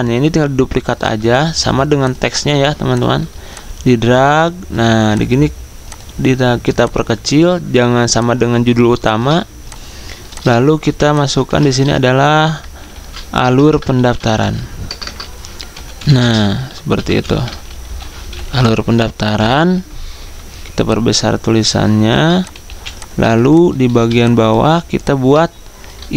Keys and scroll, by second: 1.4 ctrl+z, 11.4 ctrl+a, 12.7 a, 13.4 BackSpace, 13.6 Caps_Lock, 13.7 a, 17.2-17.9 typing, 19.2 typing.